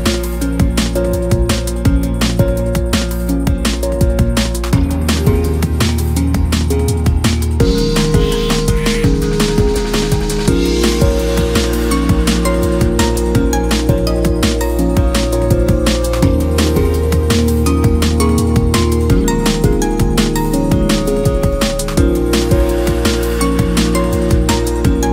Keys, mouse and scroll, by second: 0.0-0.4 scroll up 4, 1.0 shift+middle click, 1.2-1.8 scroll up 1, 1.8 shift+click, 2.2-2.7 scroll up 1, 2.7 middle click, 3.6-4.3 scroll up 1, 4.3 ctrl+b, 6.6-6.9 scroll down 4, 6.9-8.0 middle drag, 8.0 Tab, 8.2 scroll down 3, 8.4-9.6 middle drag, 9.6 scroll up 2, 9.7 Tab, 10.0-11.8 middle drag, 11.8 ctrl+r, 14.4 scroll down 1, 14.5 middle click, 14.9-15.4 scroll up 1, 15.4 shift+middle click, 15.7-16.1 scroll up 1, 16.1 shift+middle click, 16.7 ctrl+r, 19.2-19.9 scroll down 2, 19.9 Tab, 20.1-20.4 scroll down 1, 20.4 KP_1, 21.0 shift+middle click, 21.2-21.8 scroll up 1, 21.8 scroll up 1, 21.8 ctrl+1, 22.3 scroll up 1, 22.5 scroll down 1, 22.7-23.4 right drag, 23.4 scroll down 1, 23.5-25.1 middle drag.